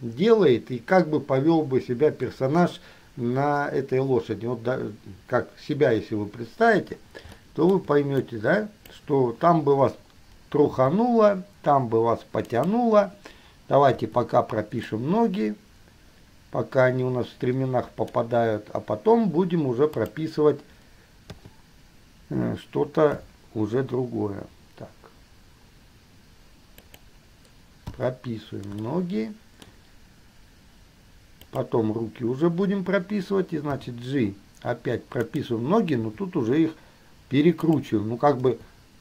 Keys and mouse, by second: 7.8 shift+middle click, 8.4 click, 10.9 g, 14.2 i, 15.1-18.3 middle drag, 20.2 middle click, 21.6 KP_3, 23.3 g, 28.2 i, 29.1-29.9 shift+middle drag, 31.7 middle click, 33.8 g, 36.2 r, 38.7 g.